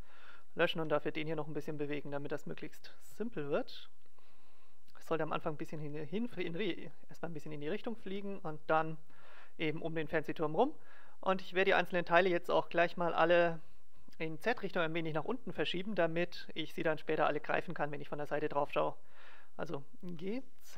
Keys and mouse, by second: 0.4-1.5 right drag, 0.7 g, 1.8 right click, 2.1 click, 3.0 g, 3.8 right click, 4.5 click, 5.1 g, 5.8 click, 5.9 right click, 6.9-8.4 drag, 7.8 right click, 8.0 g, 11.9-13.9 right drag, 20.0 g.